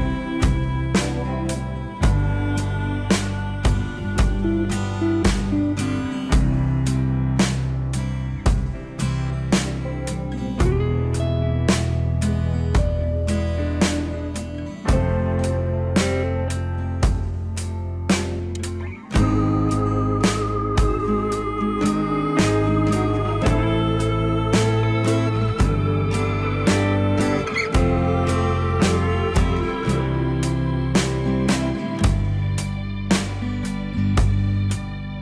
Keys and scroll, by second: 16.5 F4, 30.6 ctrl+z.